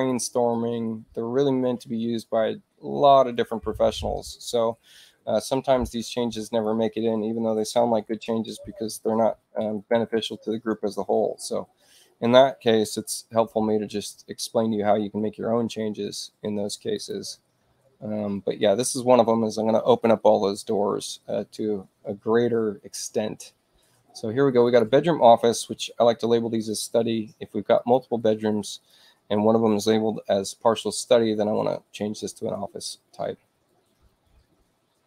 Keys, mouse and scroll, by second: 3.3 click, 6.3 click, 7.8 6, 10.2 click, 16.9 click, 24.6 click, 26.6 click, 27.7 click.